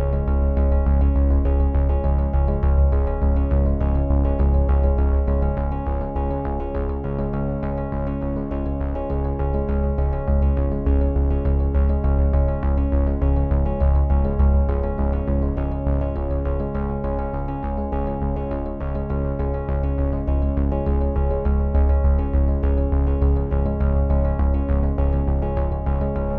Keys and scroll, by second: 1.9 z, 3.0 space, 4.5 space, 5.8 v, 6.4 c, 13.7 v, 16.1 z, 17.0 c, 23.3 z.